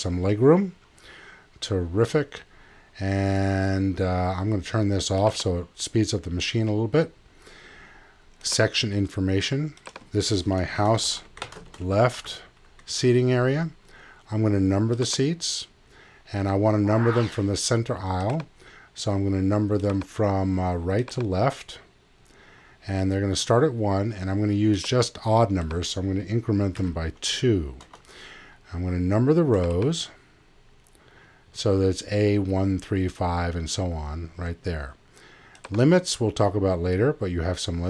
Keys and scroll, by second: 10.7-12.0 typing, 26.8 2, 27.9 Tab.